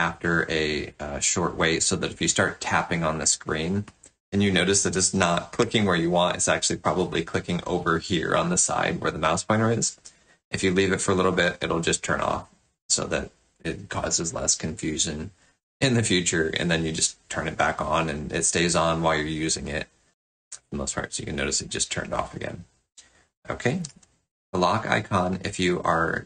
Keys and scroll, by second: 23.8 alt+Tab.